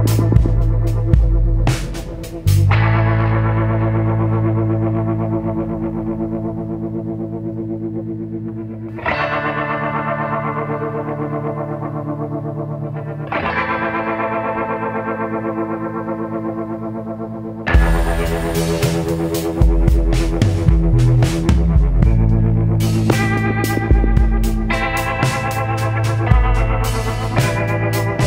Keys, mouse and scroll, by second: 1.9-3.3 drag, 5.4 click, 8.0 click, 11.6 click, 14.8 click, 16.9 click, 18.7-21.4 drag, 22.9 click, 23.8 click, 25.1-28.2 typing.